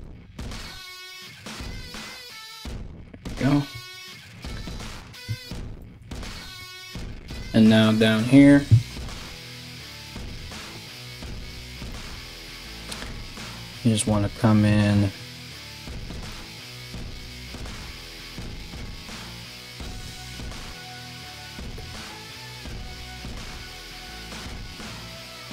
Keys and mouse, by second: 3.3 Tab, 6.1 Tab, 10.5 right click, 11.2 ctrl+right click, 12.8 g, 15.6 right click, 16.8 g, 19.6 3, 20.0 right click, 20.7 shift+right click, 21.1 shift+right click, 22.0 alt+s.